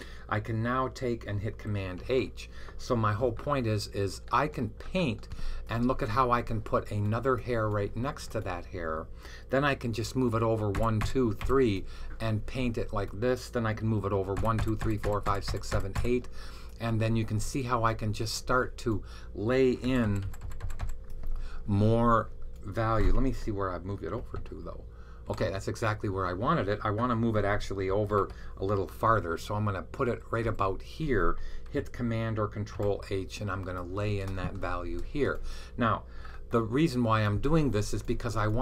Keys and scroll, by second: 1.2 Left, 1.9 super+h, 10.7 Right, 11.3 Right, 14.2 Right, 14.5 Right, 14.7 Right, 14.9 Right, 15.1 Right, 15.3 Right, 15.5 Right, 15.8 Right, 19.7 Right, 19.9 Right, 20.1 Right, 20.3 Right, 20.5 Right, 20.7 Right, 24.4 super+h, 25.1 super+h, 27.9 super+h, 28.9 Right, 29.5 Right, 30.3-32.1 Right, 32.7 super+h.